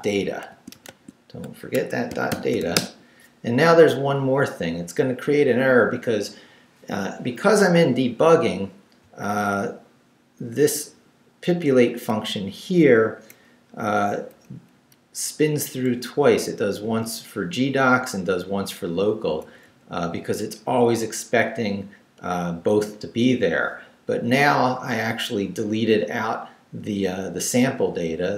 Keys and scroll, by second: 0.0 d, 0.5 a, 1.7 Escape, 2.3 shift+;, 2.6 shift+w, 2.7 Return, 9.5 Down, 12.3 Up, 13.8 Up, 14.7 Down, 18.0 Right, 20.6 Right.